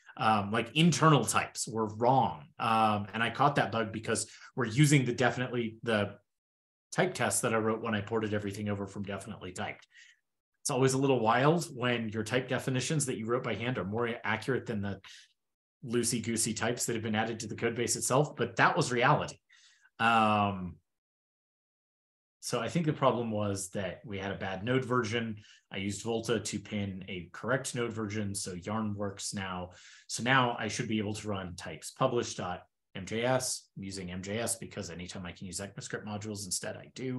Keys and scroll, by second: 22.3 super+w, 23.9 super+w, 30.2 ctrl+e.